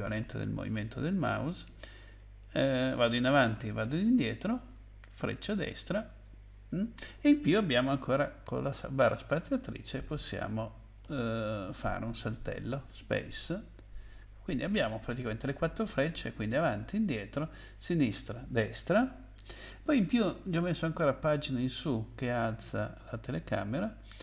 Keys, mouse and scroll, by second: 1.4 Left, 1.6 Up, 2.2 Up, 2.4 Up, 2.8 Up, 3.2 Down, 3.6 Up, 3.7 Down, 4.0 Down, 4.2 Down, 4.3 Down, 5.0 Right, 5.5 Right, 5.6 Right, 5.6 Right, 5.8 Right, 6.3 Up, 6.8 Up, 6.8 Up, 7.1 Down, 7.6 Down, 8.5 Down, 9.4 space, 11.0 space, 12.7 space, 13.8 Up, 15.2 Left, 16.2 Up, 16.8 Down, 17.3 Down, 17.5 Left, 18.0 Left, 18.1 Left, 18.2 Left, 18.4 Right, 18.9 Right, 18.9 Right, 19.1 Right, 21.1 Page_Up, 21.6 Page_Up, 21.7 Page_Up, 21.8 Page_Up, 23.8 Page_Down.